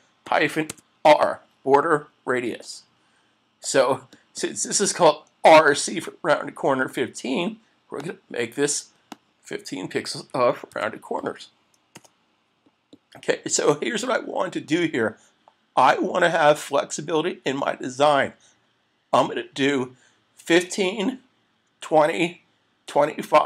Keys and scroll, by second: 2.6 Return, 12.0 Return.